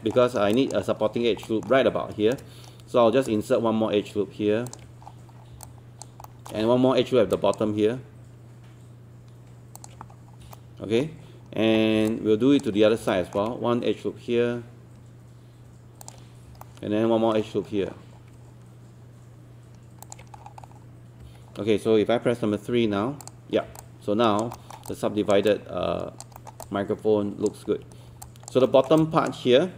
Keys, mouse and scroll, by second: 0.3 scroll up 1, 0.6 alt+click, 0.9-1.3 scroll up 1, 1.5 alt+middle click, 2.8 shift+right click, 4.7 ctrl+click, 5.1-5.5 scroll down 1, 5.7 alt+click, 6.3 alt+middle click, 6.6 scroll up 1, 7.3 alt+click, 9.8 ctrl+click, 10.1 scroll up 1, 10.5 alt+middle click, 11.5-11.8 scroll down 1, 12.1 alt+click, 12.7 scroll up 1, 13.1 alt+middle click, 16.0 ctrl+click, 16.7 alt+middle click, 17.7 scroll up 1, 20.0 ctrl+click, 20.4-20.9 scroll down 1, 21.2 scroll down 1, 22.1-22.7 scroll up 1, 22.7-23.2 scroll up 2, 23.2 click, 23.6 scroll down 1, 23.8 alt+click, 24.6 alt+middle click, 24.9 alt+click, 25.5 alt+click, 26.4 alt+middle click, 26.6 alt+click, 27.7-28.1 scroll up 1, 28.3 alt+click, 28.7 alt+middle click, 29.0 alt+click.